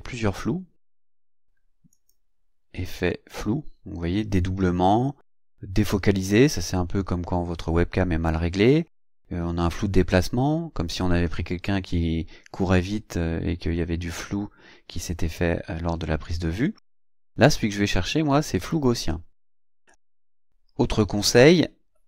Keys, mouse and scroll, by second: 1.9 click, 18.7 click, 19.9 click, 20.1-22.0 drag.